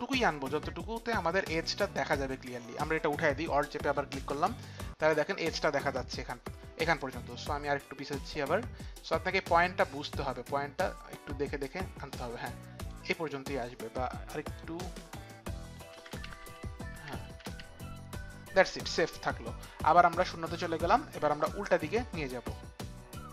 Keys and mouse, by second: 3.7 alt+click, 6.9 click, 8.8 click, 14.5 click, 15.9 Down, 15.9 click, 16.1 Down, 16.5 Down, 16.9 Down, 20.0 Down, 20.0 click, 22.5 click.